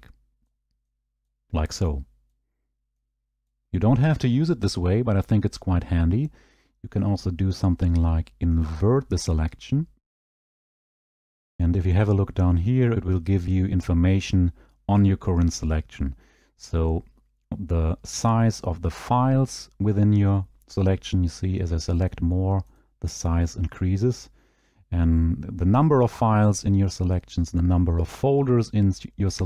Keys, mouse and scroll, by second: 0.5 right click, 1.3 right click, 2.3 right click, 3.5 right click, 8.7 click, 10.5 click, 21.3-22.1 scroll, 22.1 right click, 22.8 right click, 24.1-26.2 scroll, 27.8-28.8 scroll.